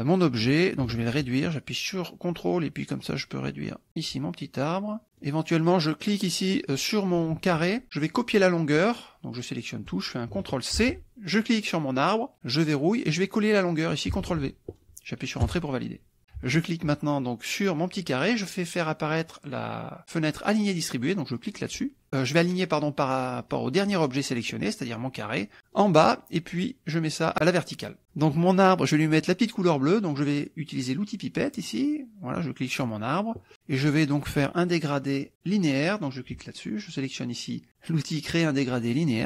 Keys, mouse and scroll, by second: 0.9-3.9 ctrl+drag, 4.2 ctrl+click, 5.0 middle click, 5.2 click, 5.8 click, 8.1 click, 9.6 click, 10.8 ctrl+c, 11.4 ctrl+click, 13.0 click, 13.7 click, 14.3 ctrl+v, 15.5 Return, 16.5 shift+click, 21.4 click, 24.1 click, 26.0 click, 27.9 click, 31.6 click, 32.8 click, 35.9 click.